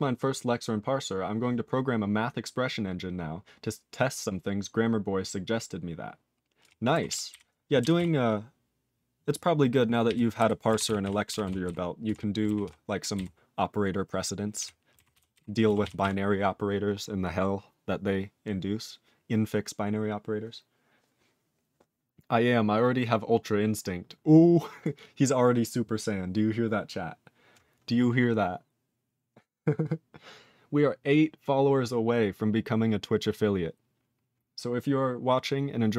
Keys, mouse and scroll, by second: 6.6 ctrl+e, 7.1 ctrl+s, 7.3 ctrl+b, 7.9 ctrl+s, 10.0 ctrl+e, 10.4 ctrl+b, 10.8 ctrl+s, 11.0 ctrl+e, 11.4 ctrl+s, 11.6 ctrl+b, 12.1 ctrl+e, 12.6 ctrl+s, 13.1 ctrl+b, 14.5 ctrl+e, 15.1 ctrl+s, 15.3 ctrl+b, 15.8 ctrl+s, 16.0 ctrl+e.